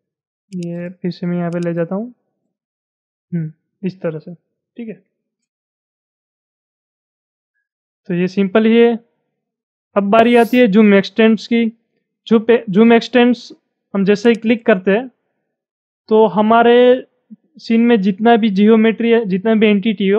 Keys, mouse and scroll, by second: 1.7-4.7 drag, 4.9-5.3 scroll down 5, 5.9 scroll down 6, 6.3-9.6 shift+middle drag, 14.3 click.